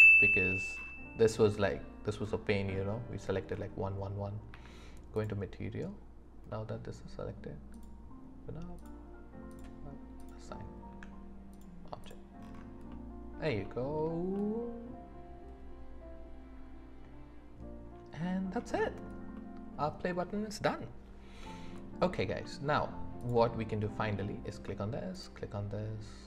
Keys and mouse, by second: 4.5 z, 6.5 middle click, 7.7 click, 8.8 click, 10.2 click, 10.9 Tab, 12.0 click, 12.9-13.4 middle drag, 13.6 shift+middle drag, 14.3-16.3 middle drag, 16.7-17.9 middle drag, 19.3-19.8 middle drag, 21.7 middle click, 22.4 shift+click.